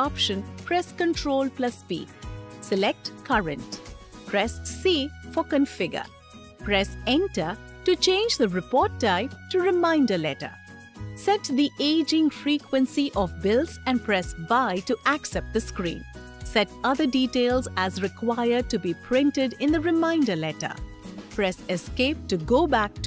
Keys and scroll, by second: 1.2 ctrl+p, 4.0 c, 6.7 Return, 13.8 y, 21.2 Escape.